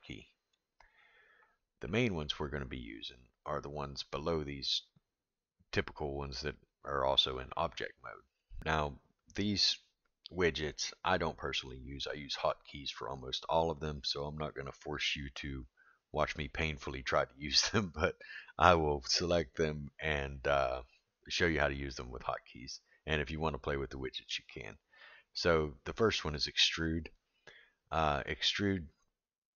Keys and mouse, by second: 26.3 click.